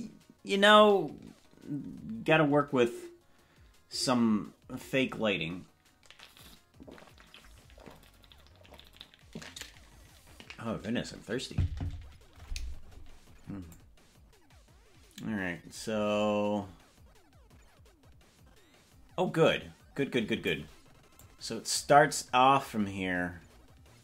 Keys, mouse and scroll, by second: 13.9-20.9 drag, 21.3-24.0 drag.